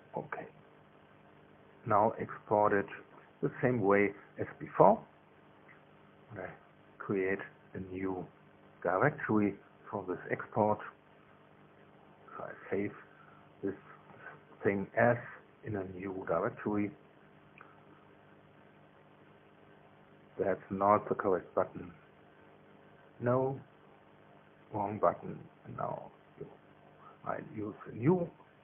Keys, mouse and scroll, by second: 0.0 click, 0.8 8, 1.4 Return, 11.8 click, 16.5 click, 22.7 click, 25.1 click, 27.4 click.